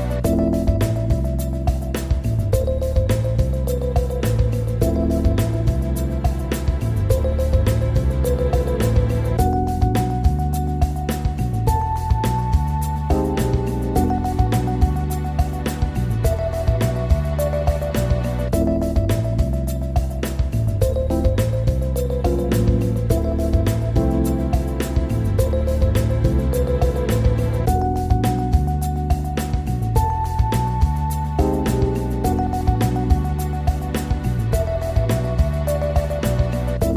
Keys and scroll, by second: 17.6 ctrl+g.